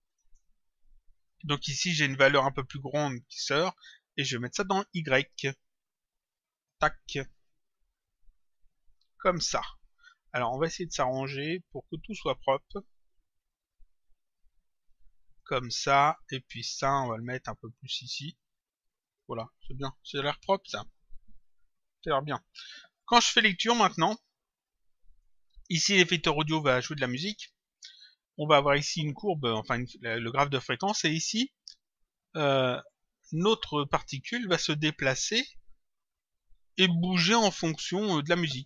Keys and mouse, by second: 0.7 click, 3.5 click, 7.9 click, 10.2 click, 12.3 click, 13.7 click, 16.1 click, 17.6 click, 19.5 click, 22.9 click, 25.1 click, 32.8 click, 38.4 click.